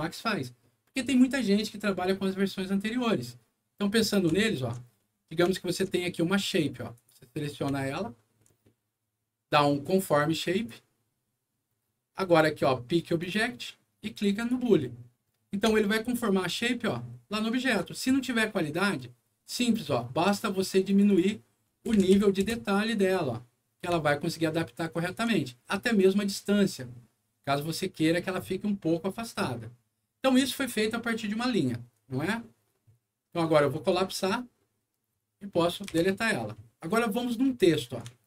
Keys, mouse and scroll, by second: 4.4 alt+middle click, 4.9 alt+middle click, 5.5 alt+middle click, 6.9 alt+click, 7.7 alt+middle click, 8.6 alt+middle click, 10.5 alt+click, 13.2 click, 14.4 click, 15.8-17.8 alt+middle drag, 18.1 alt+scroll up 1, 20.8 click, 21.0 click, 21.9 KP_0, 22.3 KP_2, 22.4 Return, 23.9-25.1 alt+middle drag, 25.9-28.3 alt+drag, 33.7 click, 35.4 middle click, 35.9 Delete, 36.6 scroll down 1, 37.6 click.